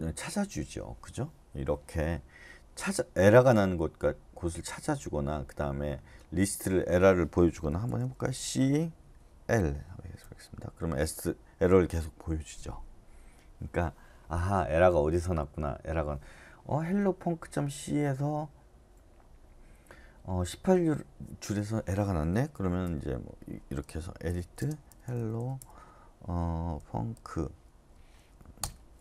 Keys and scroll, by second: 7.8 typing, 9.3-10.0 typing, 10.2 Return, 22.8 Return, 24.3-25.6 typing, 26.9-27.6 typing, 27.9 Tab, 28.6 Return.